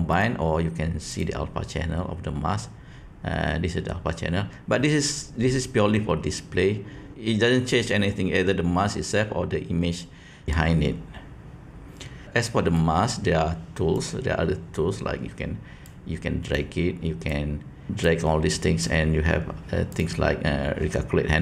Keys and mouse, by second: 12.7 click, 15.8-16.5 drag, 17.4 click, 18.0-18.7 drag, 20.0-21.4 drag.